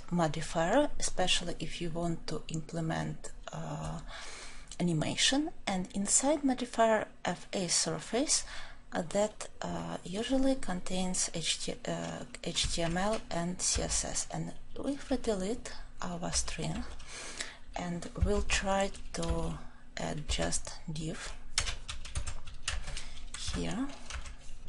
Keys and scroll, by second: 18.3 shift+Tab, 21.5 shift+Tab.